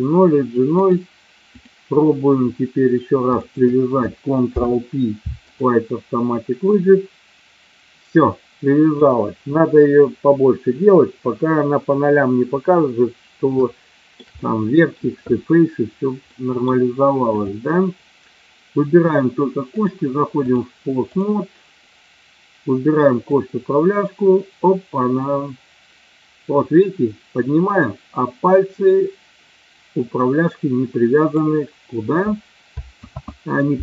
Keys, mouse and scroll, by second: 0.8-1.7 drag, 3.3 shift+click, 4.4 ctrl+p, 8.4 middle click, 13.9-14.4 shift+middle drag, 14.5-15.1 middle drag, 16.2-16.5 middle drag, 17.3 click, 19.7-20.5 drag, 23.3-31.3 drag, 33.1 ctrl+z.